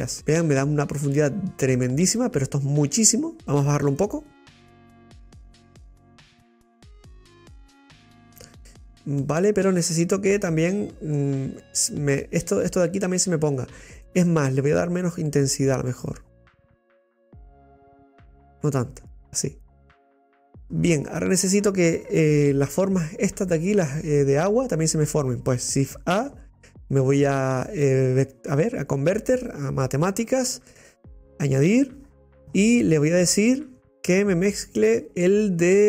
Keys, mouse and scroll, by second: 0.2-2.9 middle drag, 4.2-7.0 drag, 9.0 scroll down 2, 9.2-16.3 middle drag, 16.3-19.0 drag, 20.6 middle click, 20.7-21.0 scroll down 6, 30.8 scroll up 4, 34.0-35.0 middle drag.